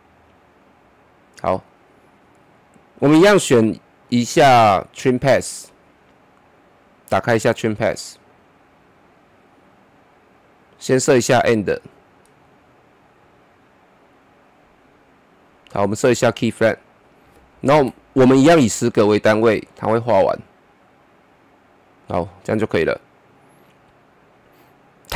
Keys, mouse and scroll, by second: 4.0 click, 8.1-10.0 scroll up 1, 10.0 scroll up 1, 11.5-16.6 drag, 17.7 shift+Page_Down, 19.7-25.1 drag.